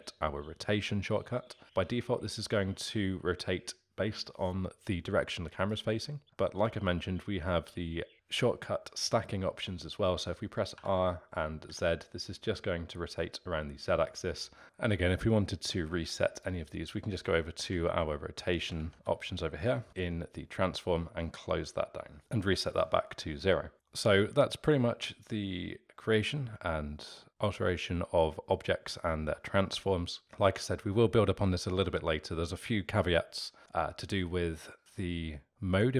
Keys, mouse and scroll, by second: 10.7 r, 14.6 click, 16.3 click, 19.4 Tab, 23.7-25.4 alt+middle drag.